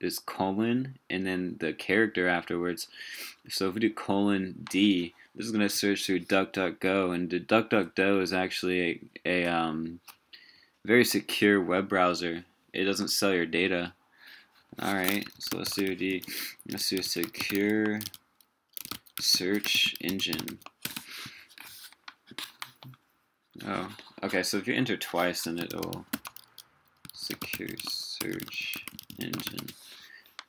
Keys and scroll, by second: 15.3 super+t.